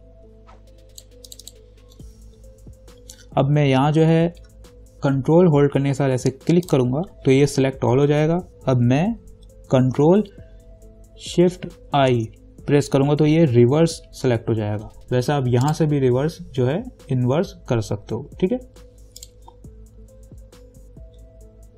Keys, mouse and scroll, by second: 6.9 ctrl+click, 12.2 ctrl+shift+i, 15.9 click, 19.4 click.